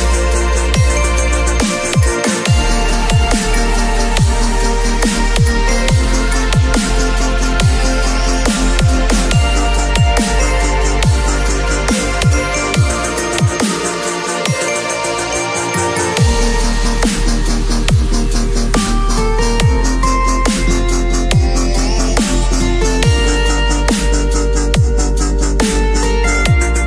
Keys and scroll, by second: 1.1 ctrl+Return, 2.5 x, 4.7 alt+Delete, 5.2 ctrl+d, 5.4 v, 11.7 b, 13.7 0, 17.8 v, 18.2 space, 24.7 p.